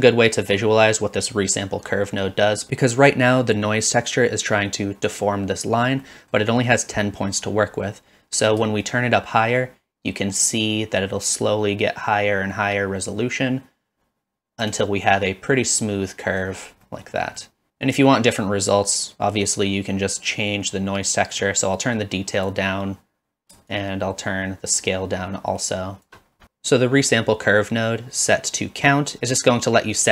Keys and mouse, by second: 2.1 middle click, 6.0 middle click, 9.0-14.6 shift+drag, 15.1-16.4 middle drag, 17.0 middle click, 17.4 middle click, 21.4-22.6 drag, 23.8-26.1 shift+drag.